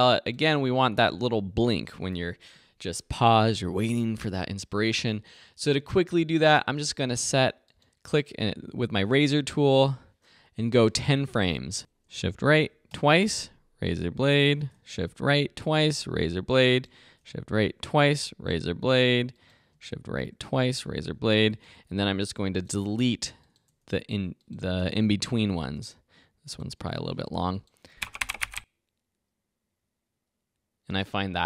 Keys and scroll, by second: 7.0 c, 12.6 shift+Right, 15.0 shift+Right, 17.4 shift+Right, 20.0 shift+Right, 21.9 v, 23.0 BackSpace, 24.8 BackSpace, 27.9 space, 30.9 space.